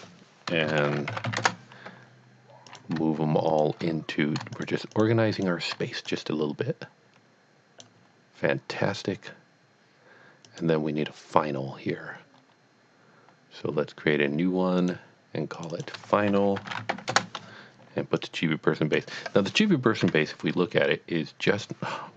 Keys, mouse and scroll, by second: 0.4-1.6 typing, 2.7 click, 3.5 shift+click, 4.6 shift+double click, 5.0 shift+click, 5.4 shift+click, 10.4 click, 14.8 click, 15.7 click, 15.7 double click, 16.3-16.9 typing, 17.1 Return, 18.2 click, 18.6 click, 19.1 click, 20.9 scroll down 1, 21.5-22.0 scroll down 1.